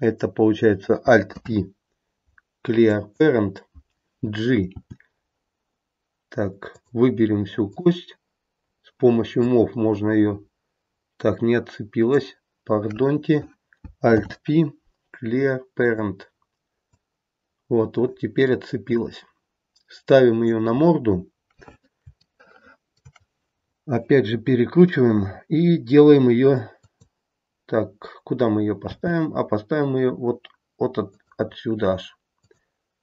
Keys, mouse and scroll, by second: 1.2 alt+p, 4.7 g, 7.7 click, 8.6-9.3 scroll down 1, 9.3 click, 14.1 alt+p, 16.8 click, 20.7-22.0 scroll up 1, 22.0 scroll up 2, 22.3 shift+middle click, 22.7 shift+middle click, 24.2 r, 28.9 g, 32.4 click.